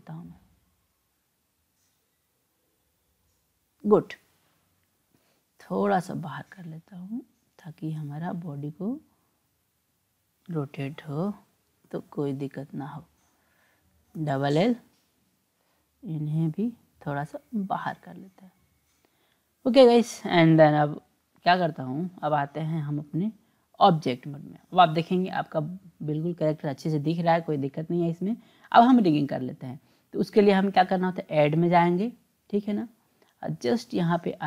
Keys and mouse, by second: 5.8-10.3 drag, 11.2 click, 11.9 l, 12.0 l, 13.0 click, 14.2 l, 14.3 l, 15.3-19.0 drag, 19.5 click, 22.8-23.9 drag, 31.2-34.4 drag.